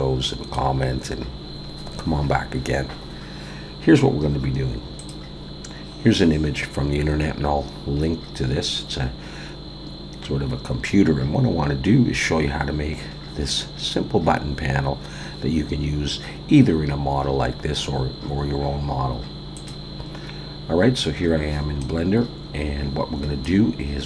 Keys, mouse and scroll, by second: 21.4-21.8 scroll down 1, 21.8 middle click.